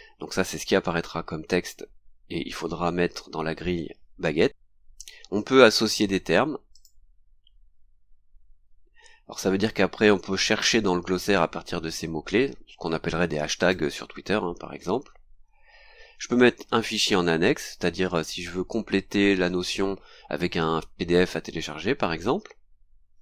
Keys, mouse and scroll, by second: 4.5 scroll down 2, 6.7 click, 13.6 click, 15.5-15.9 scroll down 2, 22.4-22.7 scroll down 2.